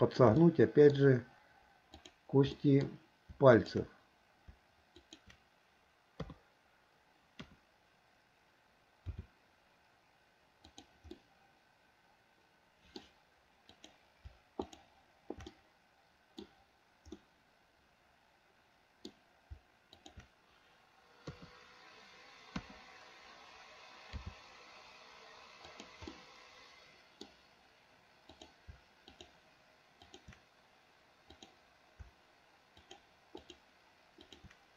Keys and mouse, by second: 0.0-0.3 shift+middle drag, 0.5-1.0 middle drag, 2.0 click, 2.6-2.9 middle drag, 3.6 shift+click, 5.0 shift+click, 6.3 KP_3, 7.5 KP_1, 9.2 r, 11.2-13.1 middle drag, 15.6-16.5 middle drag, 17.2-19.1 middle drag, 20.1 shift+click, 21.3 KP_3, 22.7 KP_1, 24.2 r, 26.2-27.3 middle drag, 28.4 click, 30.1 shift+click, 31.4 click, 32.8 shift+click, 33.5 shift+click, 34.2 shift+click.